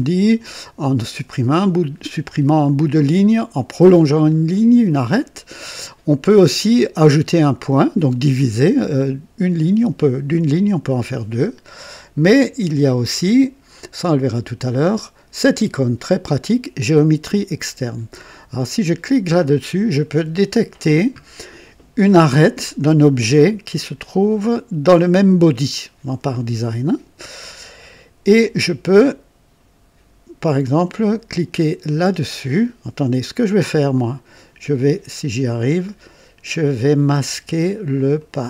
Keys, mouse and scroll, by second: 18.9 click, 34.3 click, 38.1 click.